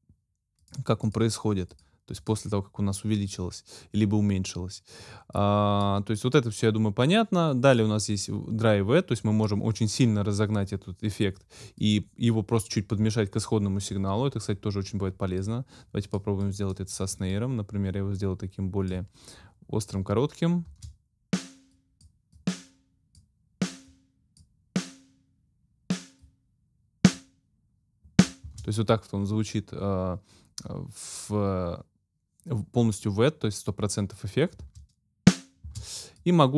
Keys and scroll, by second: 20.7 space, 28.5 space, 34.5 space.